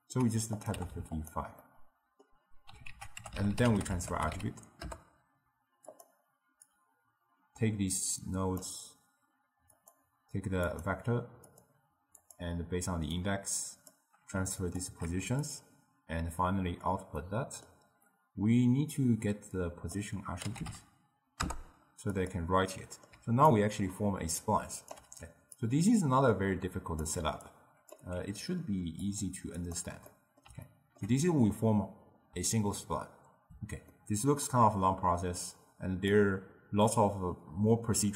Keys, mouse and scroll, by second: 0.6 click, 0.9 5, 1.7-3.0 middle drag, 3.0 ctrl+a, 6.8 click, 9.8-14.8 drag, 15.5 click, 17.3-19.6 middle drag, 19.6 drag, 22.8 middle click, 23.2 d, 23.6-25.1 right drag, 25.1 d, 25.6 click, 27.6 click, 28.3 g, 29.7 click, 30.2-33.8 middle drag, 34.0-35.5 middle drag, 35.5 click.